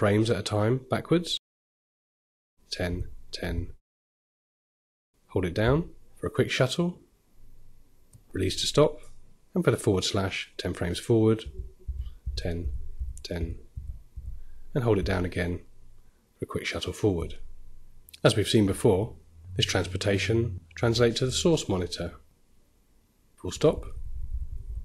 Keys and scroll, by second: 0.7-1.5 typing, 23.3 ,, 23.3 ..